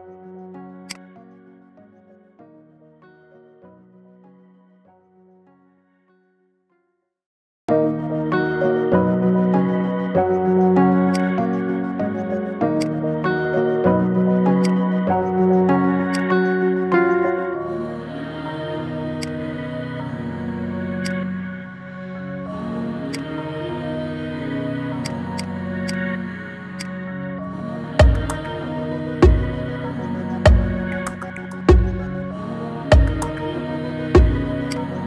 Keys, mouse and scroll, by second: 0.1 ctrl+2, 0.4 middle click, 0.9 click, 1.1-2.4 middle drag, 2.4-2.7 scroll down 5, 2.7 middle click, 3.5-4.2 middle drag, 4.2 scroll up 2, 4.5-7.0 middle drag, 7.7-9.3 scroll up 1, 9.6-10.7 shift+middle drag, 10.7 shift+a, 11.5-12.8 middle drag, 12.8 click, 13.5-14.7 middle drag, 14.7 click, 15.5 shift+s, 16.6 middle click, 17.1 shift+a, 21.4-23.1 middle drag, 23.1 click, 23.5-23.8 middle drag, 23.8-24.1 scroll up 3, 24.1-25.1 shift+middle drag, 25.1 click, 25.4-26.8 right drag, 26.8 click, 28.2 ctrl+2, 28.6-29.5 middle drag, 29.5 /, 29.9 /, 30.7-31.0 scroll down 3, 31.0-31.6 middle drag, 31.6 Tab, 32.1 shift+middle click, 32.9-33.6 scroll up 3, 33.6-34.7 shift+middle drag, 34.7 click.